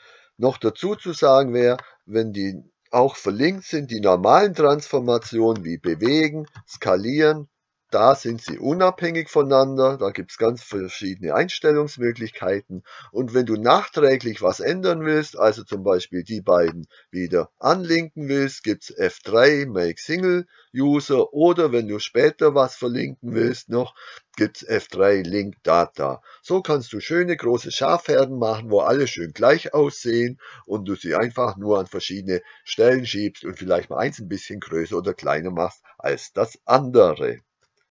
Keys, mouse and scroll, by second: 0.6 Tab, 1.6 click, 5.1 g, 8.6 click, 15.6 click, 16.6 click.